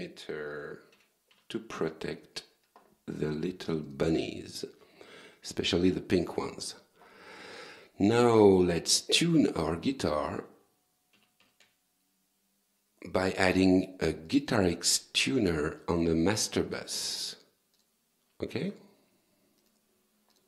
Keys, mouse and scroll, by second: 0.0-1.3 typing, 3.9 click, 6.3 click, 9.1 right click, 9.6 click, 11.2 t, 11.4 u, 11.6 n, 14.3 click, 15.8 click, 18.6 alt+Tab.